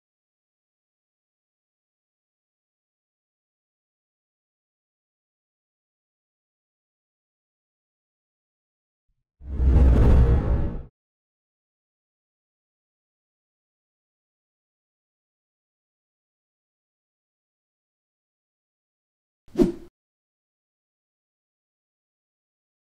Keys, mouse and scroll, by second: 1.0-1.4 typing, 1.4 click, 10.8 click, 10.8 typing, 15.5 click, 17.0 space, 17.1 click, 19.7 typing, 19.9-23.0 drag.